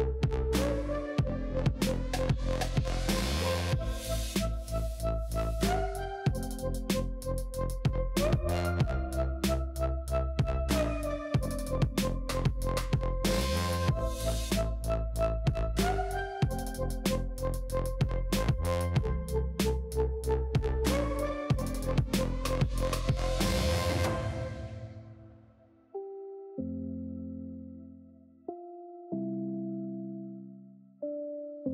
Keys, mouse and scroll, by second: 0.1 ctrl+KP_Add, 0.4 ctrl+KP_Add, 1.5-2.7 shift+middle drag, 2.7 KP_1, 3.0 scroll up 4, 3.2 shift+middle click, 3.5-4.0 scroll down 1, 4.0 alt+z, 4.7 1, 4.9-5.6 scroll down 2, 5.6 c, 8.4 alt+z, 8.8 middle click, 9.0-9.9 scroll down 2, 9.9 click, 10.5-12.4 scroll down 2, 12.4 click, 13.1-14.7 middle drag, 14.7 alt+click, 15.2 3, 15.6 alt+click, 16.9 middle click, 17.3-17.6 scroll up 1, 17.6 shift+middle click, 17.9-18.6 scroll up 1, 19.7 e, 21.1 s, 22.4 i, 23.8 e, 26.6 click, 26.9 scroll down 3, 27.2-28.1 middle drag, 28.1 scroll up 1, 29.2 ctrl+z, 29.8 ctrl+KP_Add, 30.1 ctrl+KP_Add, 30.5 ctrl+KP_Add.